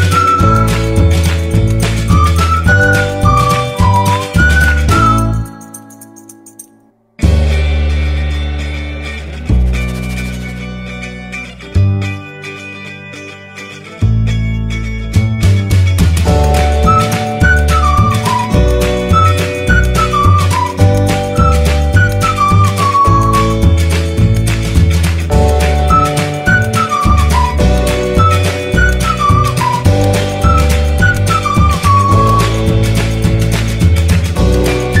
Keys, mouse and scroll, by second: 1.0-1.9 scroll down 1, 1.9-4.2 scroll down 1, 4.7-14.5 drag, 18.4 t, 23.6 click, 26.9 click.